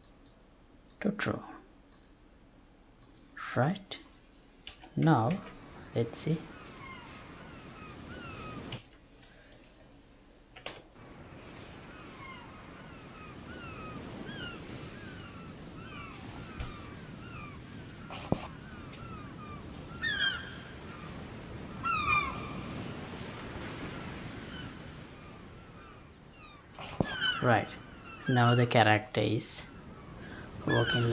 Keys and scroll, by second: 4.6 F11, 5.3 alt+p, 8.8 Escape, 10.7 alt+p, 18.8 space.